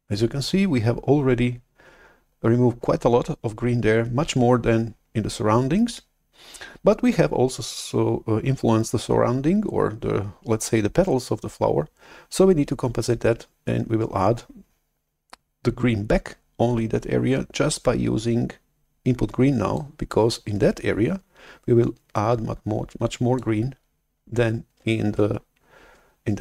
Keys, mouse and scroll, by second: 19.9-24.6 drag.